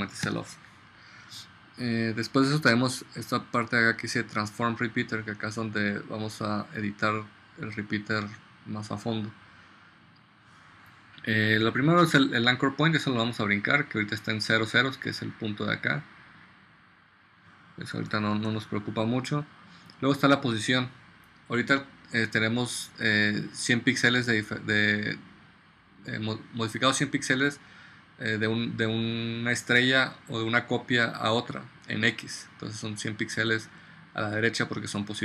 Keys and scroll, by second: 0.3 0, 18.4 super+z.